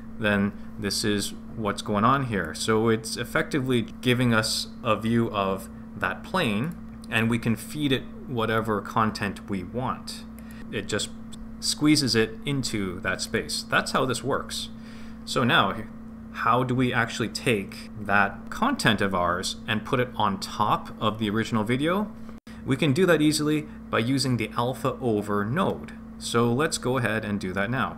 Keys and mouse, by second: 2.4 click, 6.6 click, 8.5 click, 10.3 click, 13.2 click, 27.5-27.9 middle drag.